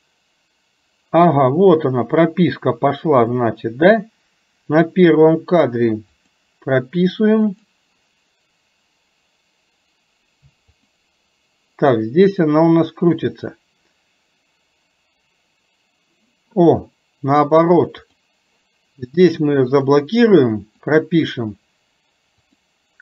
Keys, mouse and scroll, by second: 3.3 click, 4.2 click, 6.3 click, 7.6 click, 10.8 click, 12.5 click, 18.1 click, 19.7 click, 21.0 click, 22.6 click.